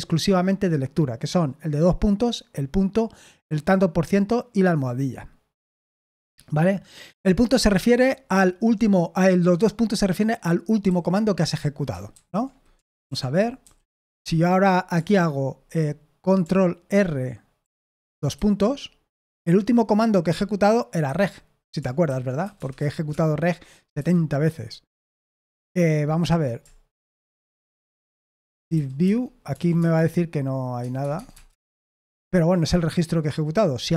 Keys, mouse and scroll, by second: 10.8 j, 12.1 super+h, 12.8 super+l, 13.0 super+l, 13.3-14.6 typing, 17.6 ctrl+r, 18.3 shift+;, 21.0 Escape, 22.1-23.2 typing, 23.9 Escape, 28.1-29.5 typing, 29.7 Tab, 30.8 Tab, 31.0 Tab, 31.1 Tab, 31.3 Tab, 31.4 Return.